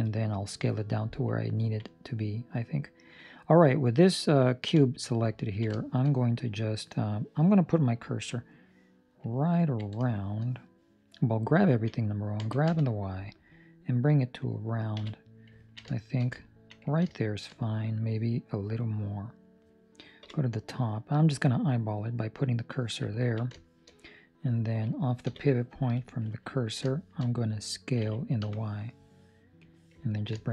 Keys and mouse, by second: 1.5 ctrl+middle click, 1.8 middle click, 3.6 middle click, 4.6 KP_7, 5.4 ctrl+middle click, 5.7 shift+middle click, 8.0 ctrl+middle click, 9.7 ctrl+middle click, 10.0 shift+middle click, 12.3 g, 14.9 KP_3, 15.5 ctrl+middle click, 15.9 shift+middle click, 16.3 ctrl+middle click, 17.0 shift+middle click, 18.6 click, 20.1 KP_7, 22.5 click, 23.1 ctrl+middle click, 23.7 shift+middle click, 26.5 ctrl+middle click, 26.8 shift+middle click, 27.9 s, 30.0 ctrl+middle click, 30.3 shift+middle click.